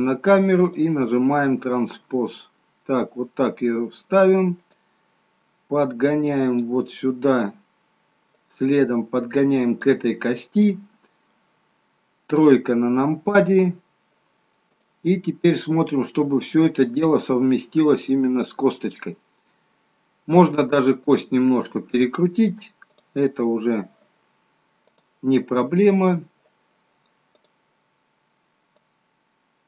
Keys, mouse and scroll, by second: 0.6 click, 1.8 click, 4.8 click, 8.4 click, 10.4 middle click, 12.5 KP_3, 14.7 click, 16.1-16.4 scroll up 5, 17.3 shift+middle click, 22.9 click, 27.3 click, 28.9 click.